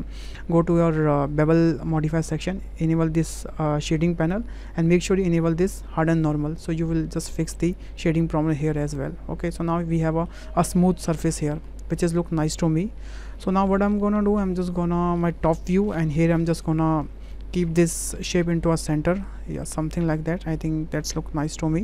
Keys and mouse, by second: 2.7 click, 6.2 click, 7.0-7.5 middle drag, 7.8-10.3 middle drag, 10.5-11.5 middle drag, 12.1 middle click, 14.9 shift+click, 15.5 shift+click, 16.4 w, 17.3-21.8 drag.